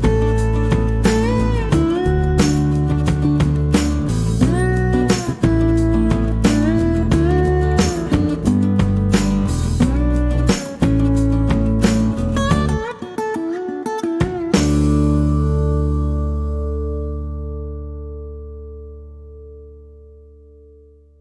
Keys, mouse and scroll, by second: 1.6 click, 3.4 click, 4.0 middle click, 4.4 middle click, 4.5-5.9 drag, 10.7 click, 11.1 middle click, 16.0 click, 18.9 click.